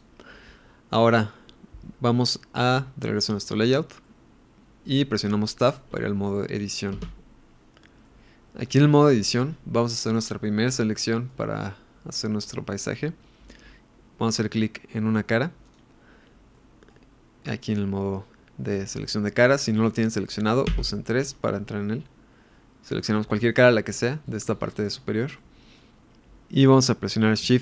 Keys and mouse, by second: 0.0-1.2 drag, 1.2-2.6 middle drag, 4.0-5.3 middle drag, 7.2 Tab, 8.0-9.8 middle drag, 10.9 middle click, 16.5 middle click, 20.7 3, 23.4 click, 24.3 middle click, 25.4 middle click.